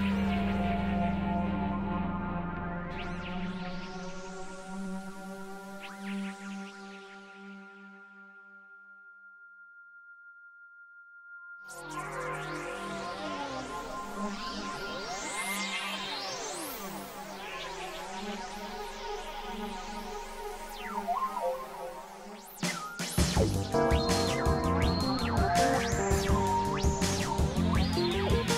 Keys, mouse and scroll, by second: 1.1 x, 1.4 click, 2.0 click, 3.4 click, 5.5 click, 6.4 x, 7.2 click, 8.5 click, 10.2 click, 12.5-13.5 drag, 13.7 click, 14.8 click, 15.7 click, 16.7 click, 18.3 click, 19.9 click, 20.8 click, 21.7 click, 22.3 middle click, 23.0 KP_3, 23.7 x, 24.3-27.4 drag, 27.9 x, 28.3 click.